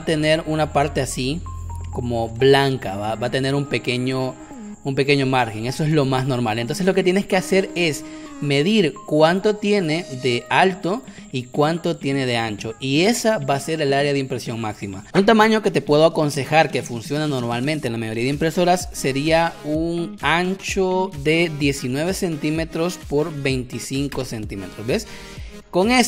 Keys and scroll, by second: 2.9 space, 6.2 space, 7.0 space, 19.1 m, 24.3 Return, 25.3 v.